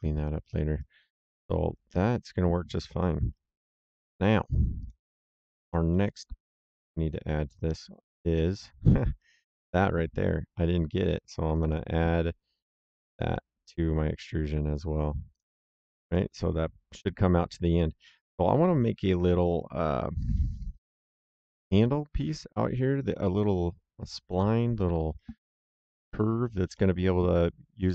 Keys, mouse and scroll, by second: 0.2 right click, 1.4 middle click, 4.7 click, 5.6 middle click, 6.5 right click, 11.4 click, 13.0 click, 15.2 click, 16.0 middle click, 19.1 right click, 23.4 right click, 26.7 middle click.